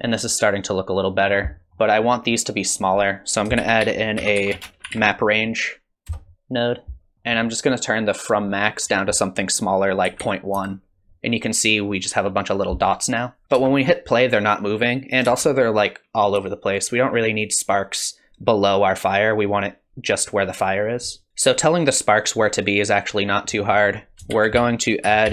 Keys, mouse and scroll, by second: 0.7 click, 1.7 middle click, 1.7 scroll down 3, 2.6-3.2 scroll up 1, 3.2 click, 3.2 scroll up 1, 3.6 shift+a, 7.1 ctrl+s, 7.1 middle click, 7.1-7.5 scroll up 4, 8.7 click, 13.4 middle click, 13.4 click, 13.4 scroll down 4, 13.6 space, 15.3 space, 23.5-24.2 scroll up 2, 23.8 click, 24.3 shift+a.